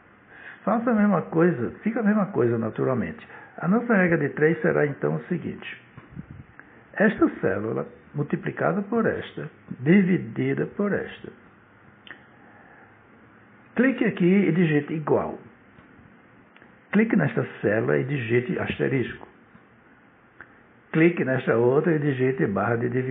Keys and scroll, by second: 15.1 =, 18.8 *.